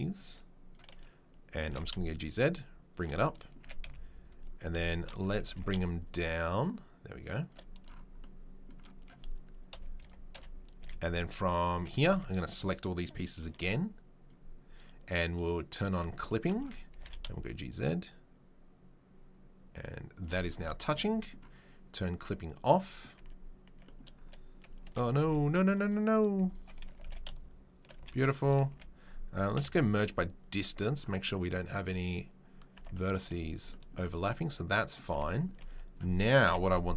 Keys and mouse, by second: 1.6 g, 3.6 a, 3.8 z, 5.4 g, 9.7-10.8 typing, 12.1 1, 13.4 b, 15.8 click, 15.9-22.2 shift+middle drag, 16.4 shift+3, 16.9 g, 22.2 click, 22.3-36.9 middle drag, 23.2 Tab, 23.6 Tab, 24.8 2, 25.2 z, 26.9 g, 27.9 z, 28.7 a, 29.5 m, 33.2 z, 35.1 Tab, 36.4 KP_7, 36.6 z.